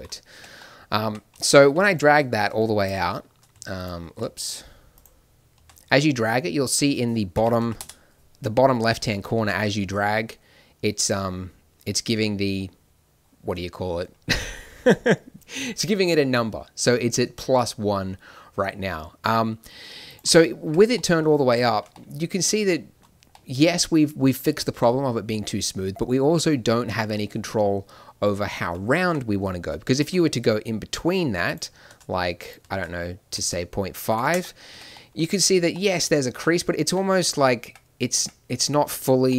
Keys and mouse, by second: 0.3 Tab, 1.0 Tab, 5.5 shift+e, 9.3 shift+e, 20.6 Tab, 29.0 Tab, 29.9 shift+e, 31.8 shift+e, 32.7 shift+e, 34.6 Tab, 37.6 Tab, 38.1 Tab.